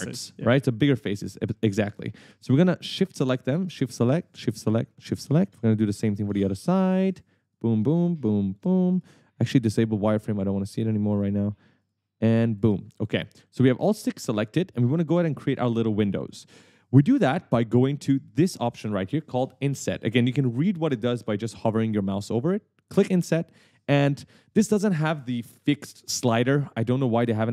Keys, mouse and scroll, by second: 0.1 shift+click, 1.0 shift+click, 1.3 right click, 1.4 a, 3.1 shift+click, 3.7 shift+click, 4.5 shift+click, 5.1 shift+click, 5.4 right click, 5.5 d, 6.8 shift+click, 7.0 right click, 7.6 shift+click, 8.1 shift+click, 8.6 shift+click, 8.9 right click, 10.5 click, 11.0 right click, 11.0 a, 12.0 shift+click, 12.7 shift+click, 13.0 a, 13.3 s, 14.0 w, 23.0 click, 24.1 right click.